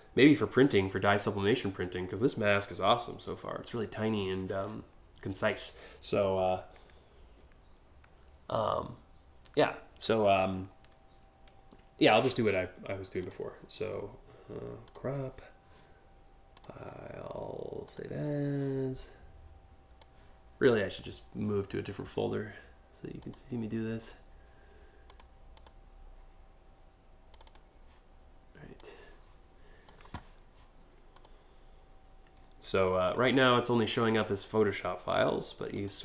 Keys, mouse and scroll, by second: 12.8 click, 14.4 click, 16.1 click, 17.5 click, 19.6 click, 20.5 click, 22.8 click, 24.7 click, 25.2 click, 26.9 click, 28.3-29.5 drag, 30.8 click, 35.3 click.